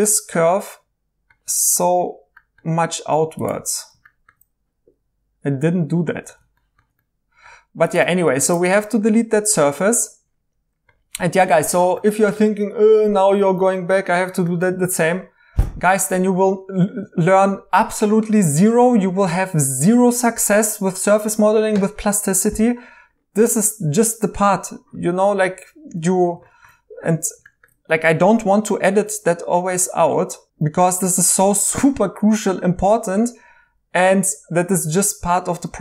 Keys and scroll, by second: 8.0 Tab, 8.6 Tab, 12.4 e, 13.5 Escape, 25.5 Escape, 34.6 2.